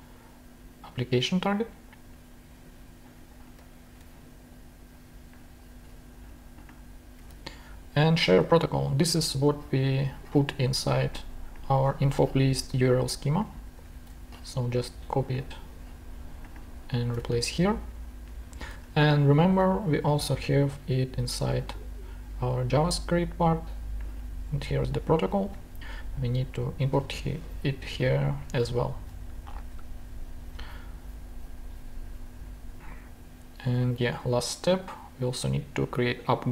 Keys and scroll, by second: 3.6 super+a, 3.8 super+c, 7.3 super+v, 14.0 super+c, 17.1 super+v, 18.7 super+Tab, 25.5 super+v, 28.6 super+Tab.